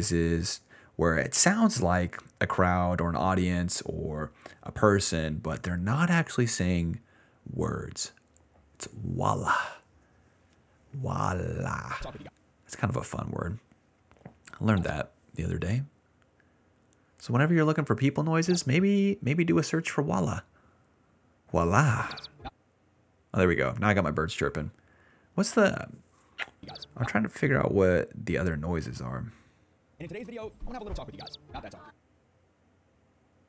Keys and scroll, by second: 1.0-2.8 typing, 10.3 d, 11.3 BackSpace, 11.9 space, 12.2 space, 13.3 d, 14.7 space, 14.9 space, 15.0 d, 18.4 space, 18.7 space, 21.9 space, 22.4 space, 22.6 s, 23.3 d, 26.5 space, 27.0 space, 27.1 s, 27.2 s, 28.7 s, 29.9 space, 31.1-32.6 typing.